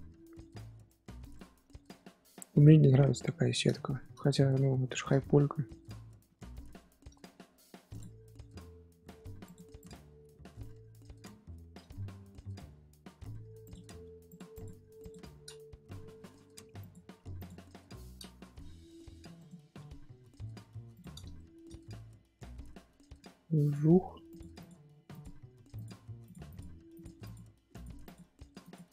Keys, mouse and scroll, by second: 1.7-3.2 scroll up 1, 3.2 scroll down 4, 3.7-5.3 shift+middle drag, 5.3 scroll up 2, 5.9 Tab, 6.2-7.1 middle drag, 7.1 scroll up 2, 7.9 click, 8.2 scroll up 1, 8.5 g, 9.7 click, 10.0-10.4 scroll up 2, 10.4 scroll down 4, 11.7-13.6 middle drag, 11.7-12.6 scroll down 2, 12.6-13.3 scroll down 1, 13.3-13.6 scroll down 1, 13.6 click, 14.5 click, 17.3 click, 17.6 KP_7, 18.6 g, 21.3-23.6 shift+middle drag, 23.6 click, 24.5 click, 25.7 click, 26.4 click, 27.2 click, 27.5 g, 28.0 click.